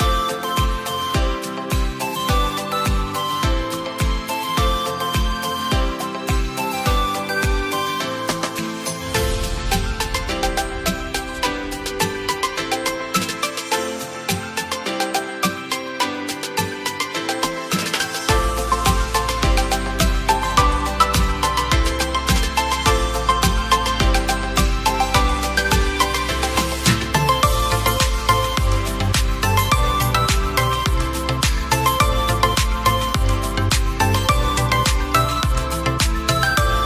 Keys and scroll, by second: 26.7 ctrl+z.